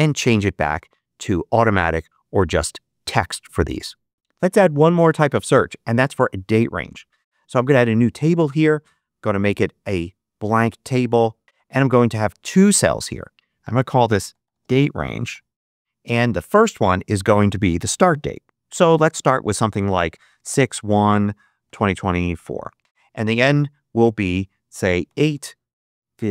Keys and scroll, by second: 13.8-15.7 typing, 19.8-22.2 typing, 22.8 Tab, 24.9-26.3 typing.